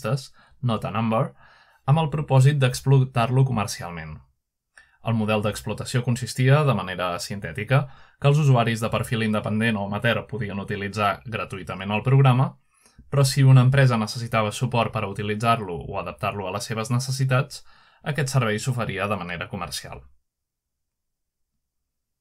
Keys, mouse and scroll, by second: 0.0-2.5 scroll down 2, 3.1-10.8 drag, 13.4-15.8 scroll down 1, 17.4-19.8 scroll down 1, 19.8-22.2 scroll down 1.